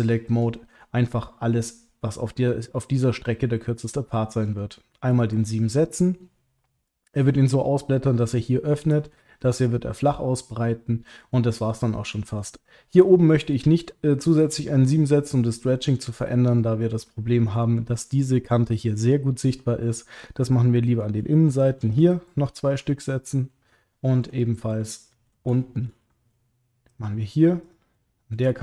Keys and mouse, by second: 0.2 ctrl+click, 3.9 middle click, 5.6 middle click, 6.8 middle click, 9.0 middle click, 9.8 middle click, 10.8 middle click, 11.3 ctrl+middle click, 12.1 middle click, 13.5 middle click, 14.9-16.1 middle drag, 17.6 middle click, 19.1 middle click, 20.5 middle click, 21.5 shift+click, 22.5 middle click, 23.2 middle click, 23.8 ctrl+middle click, 24.4 middle click, 24.9 ctrl+middle click, 25.5 shift+middle click, 26.1 ctrl+middle click, 27.9 middle click.